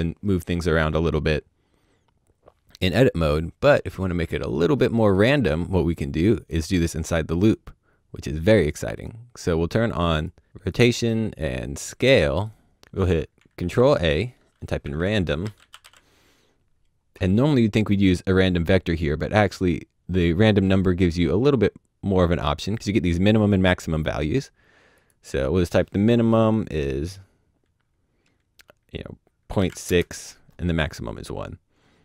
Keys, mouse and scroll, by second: 0.1 click, 5.9 middle click, 7.4 click, 12.8 shift+click, 13.6 ctrl+a, 14.8-15.8 typing, 20.9 click, 24.9 click, 29.5 KP_Decimal, 29.8 KP_Enter.